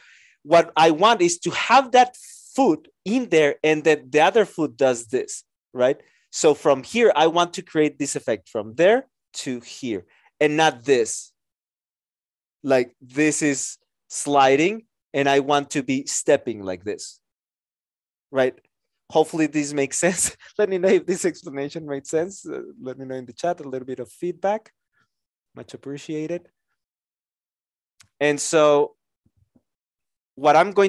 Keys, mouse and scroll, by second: 28.0 Return.